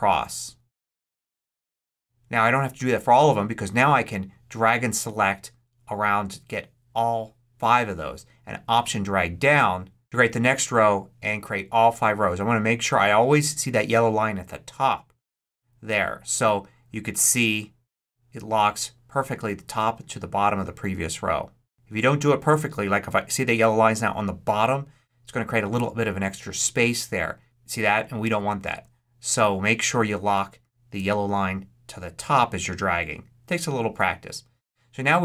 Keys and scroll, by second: 28.1 super+z.